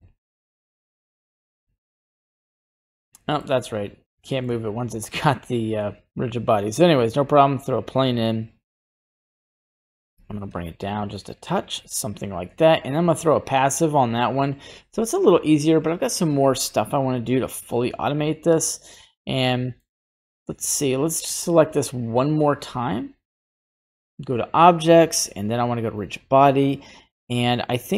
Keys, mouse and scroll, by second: 1.3 scroll down 1, 1.4 middle click, 1.6 scroll up 1, 2.7 right click, 3.2 middle click, 3.2 scroll down 1, 3.6 scroll up 2, 4.2 shift+middle click, 5.1 shift+a, 8.0 s, 10.1 g, 13.0 click, 17.5 right click, 19.1 scroll down 1, 19.2 middle click, 20.8-22.9 right drag, 24.1-27.9 drag.